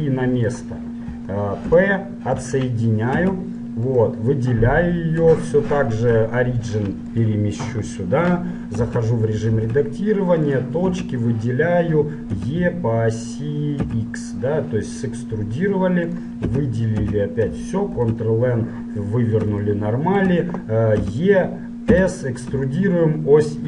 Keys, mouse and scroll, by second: 2.0 p, 3.4 Tab, 4.1-6.0 right drag, 6.2 ctrl+alt+shift+c, 9.0 Tab, 9.8 ctrl+Tab, 11.1 a, 11.5-13.3 middle drag, 12.5 e, 16.7 a, 17.1 a, 18.0 ctrl+n, 19.8-21.7 middle drag, 21.1 e.